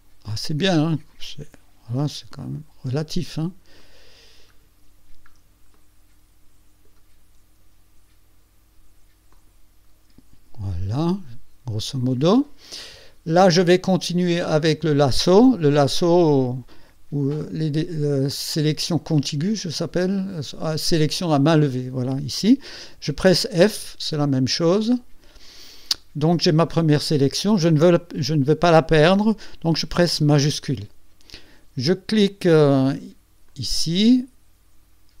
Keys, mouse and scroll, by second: 1.2 click, 2.9 click, 3.8 click, 4.8-5.1 ctrl+scroll down 2, 5.7-7.1 ctrl+drag, 9.3 click, 11.0-12.4 drag, 12.7 click, 12.8 middle click, 13.4 click, 13.6 scroll up 1, 14.3 scroll down 1, 23.8 f, 33.5 shift+click.